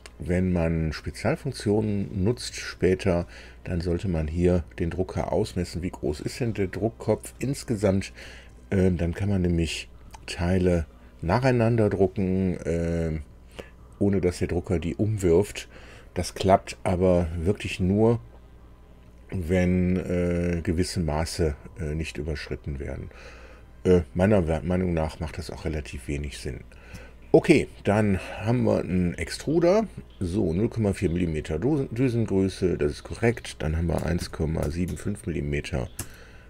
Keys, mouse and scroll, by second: 29.0 click, 32.7 click, 33.9 KP_1, 34.1 KP_Decimal, 34.6 KP_7, 34.9 KP_5, 35.9 Tab.